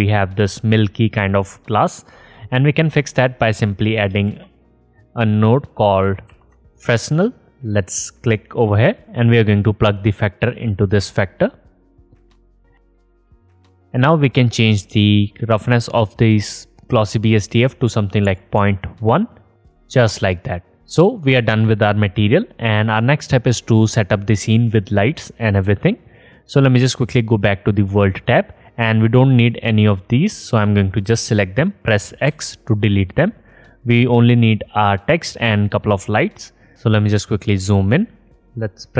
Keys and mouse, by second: 4.3-4.8 drag, 5.3 middle click, 6.2 shift+a, 11.8-19.8 middle drag, 28.3 click, 34.1 x, 38.5 n.